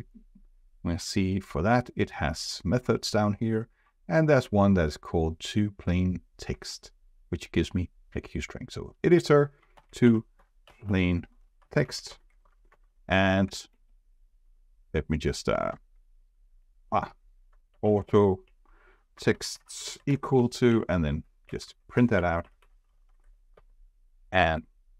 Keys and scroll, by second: 8.1 Escape, 23.6 ctrl+r.